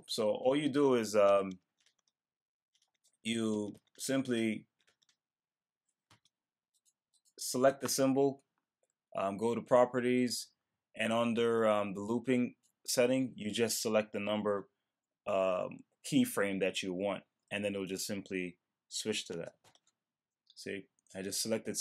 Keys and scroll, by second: 19.6 Return.